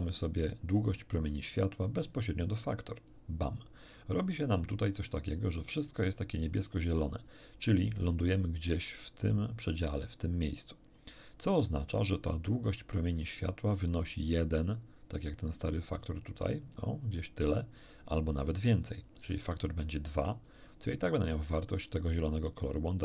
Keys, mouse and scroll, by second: 15.8 click, 16.4-18.0 drag, 19.5 click, 20.1 2, 20.4 click.